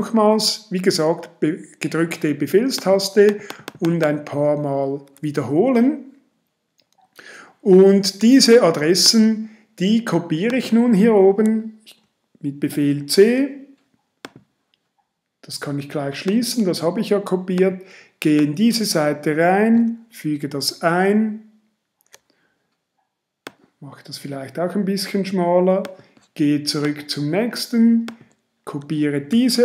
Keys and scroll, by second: 12.9 super+c, 20.4 super+v, 29.3 super+c.